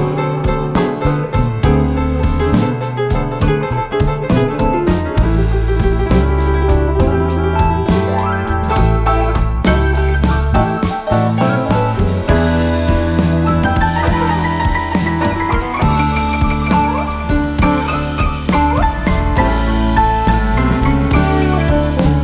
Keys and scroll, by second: 21.8 a.